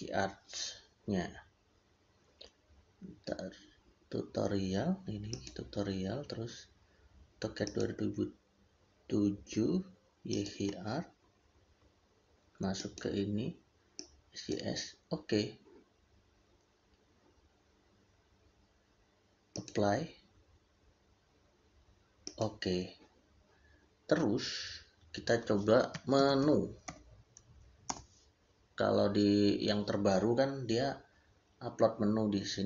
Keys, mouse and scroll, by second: 5.1 click, 10.1 click, 19.4 click, 25.6-26.5 typing, 27.7 Return.